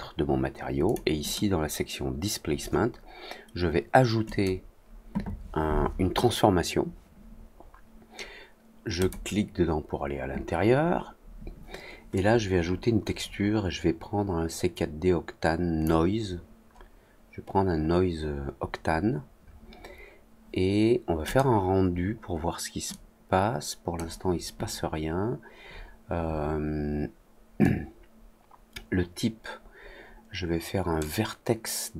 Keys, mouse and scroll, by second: 0.8 click, 1.2 click, 4.2 click, 8.9 click, 12.1-15.8 drag, 21.2 click, 22.8-23.9 drag, 27.5-30.9 drag.